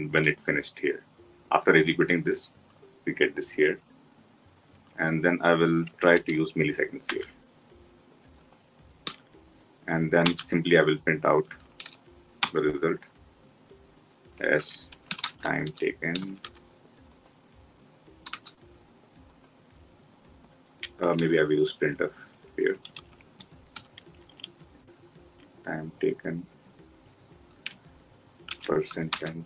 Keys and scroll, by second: 6.9 Return, 12.2 Return.